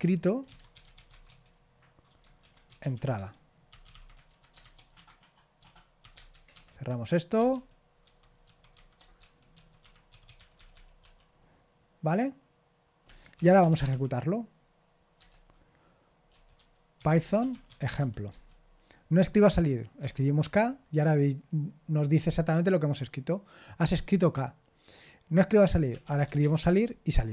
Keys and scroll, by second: 0.0-1.6 typing, 2.9-6.8 typing, 8.7-11.5 typing, 9.8 Escape, 13.4-14.4 typing, 17.0-18.3 typing, 18.3 Return, 26.2 typing, 26.6 Return.